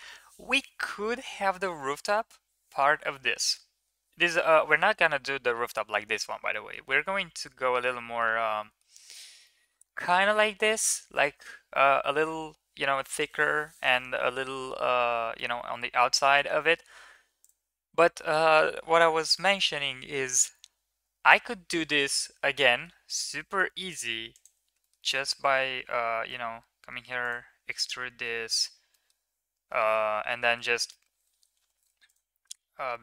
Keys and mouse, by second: 17.2 click, 22.4 middle drag, 23.0 click, 23.9 3, 24.2 click, 24.6 shift+middle click, 24.8 middle click, 26.1 e, 28.4 click, 28.7 middle click, 29.6 middle click, 30.2 middle click, 31.4 3, 32.7 middle click.